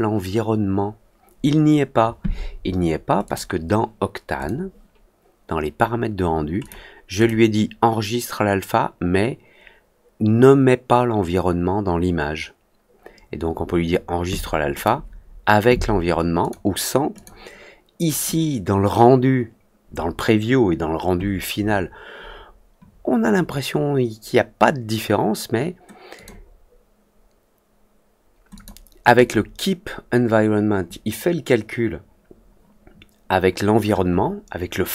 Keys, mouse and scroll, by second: 3.2 click, 4.3 click, 6.5 click, 7.1 click, 14.7 click, 16.3 click, 17.1 click, 26.1 click, 28.5 click, 29.1 click.